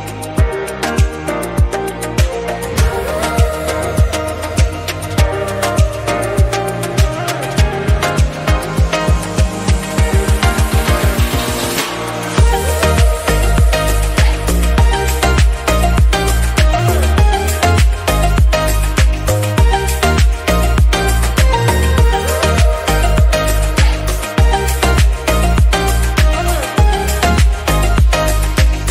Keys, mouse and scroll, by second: 0.1 KP_1, 0.5 Tab, 2.8-3.9 middle drag, 3.9 KP_1, 5.3 2, 5.7 2, 5.9 alt+click, 6.5 ctrl+x, 8.1 3, 8.7 1, 9.0 click, 10.2 a, 10.4 a, 10.9 alt+s, 14.3 click, 15.4-16.8 shift+drag, 16.8 /, 17.3 KP_1, 18.6 Tab, 19.0 scroll down 1, 19.1-19.8 middle drag, 19.8 s, 21.3 click, 21.5 scroll down 1, 21.6-22.5 middle drag, 22.5 scroll down 2, 22.7 middle click, 23.0 scroll up 1, 23.3 click, 23.6 KP_1, 24.6-24.9 scroll up 1, 24.9 Tab, 25.2-25.6 scroll up 1, 25.6 alt+z, 26.3 alt+s, 28.7 click.